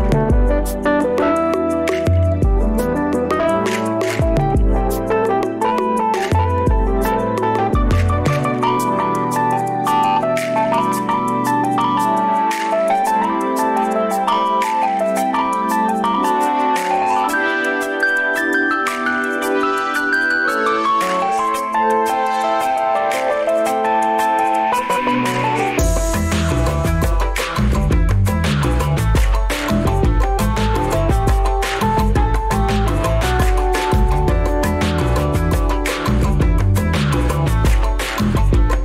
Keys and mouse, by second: 0.4-4.1 right drag, 1.8 Escape, 3.0 g, 7.0 alt+g, 7.0 alt+z, 7.6 alt+z, 9.0 Tab, 9.4 Tab, 10.4 g, 13.2-13.6 shift+middle drag, 18.7-19.7 right drag, 21.7 Escape, 21.7 click, 25.6 g, 33.3 ctrl+z, 33.6 ctrl+z, 34.9 click, 35.7 g, 36.8-38.2 right drag.